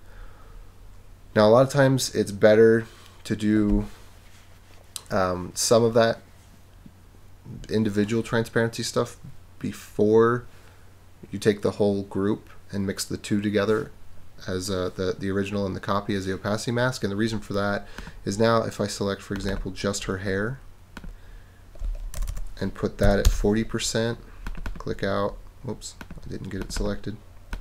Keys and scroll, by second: 22.1 BackSpace, 23.0 4, 23.2 Return.